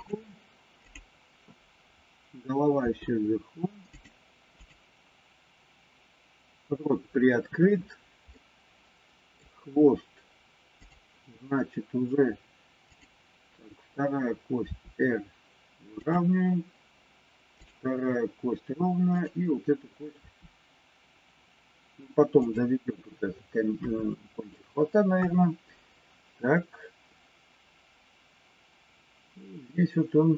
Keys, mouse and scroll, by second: 0.9 click, 2.8 r, 4.6 click, 8.2-9.4 middle drag, 10.6 click, 14.6 r, 19.1 click, 20.1 r, 25.1 KP_3.